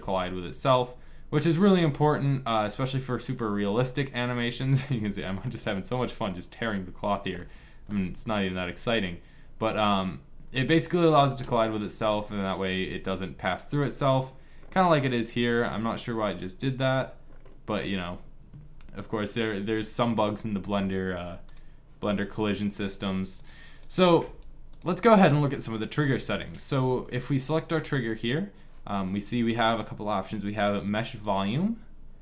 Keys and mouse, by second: 4.6 click, 5.3 g, 7.8 g, 9.8 middle click, 13.5-15.4 middle drag, 15.4-17.2 drag, 17.2 middle click, 22.2 click, 23.5 click, 23.9 g, 31.6-32.2 drag.